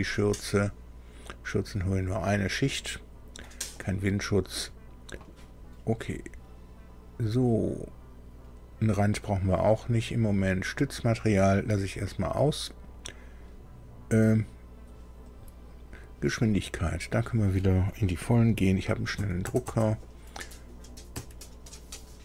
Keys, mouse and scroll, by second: 10.3 click, 15.2 click, 16.9 click, 19.1 KP_1, 19.4 KP_0, 19.6 KP_0, 21.1 Tab.